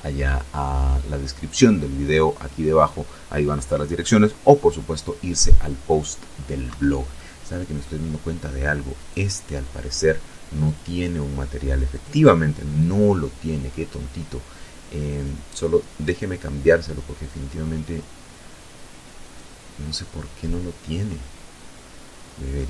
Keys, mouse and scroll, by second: 5.3 Escape, 5.8 middle click, 6.6-7.1 scroll up 1, 7.6 right click, 9.3 click, 10.6 click, 11.4 click, 13.8 right click, 17.9 right click, 21.2 right click.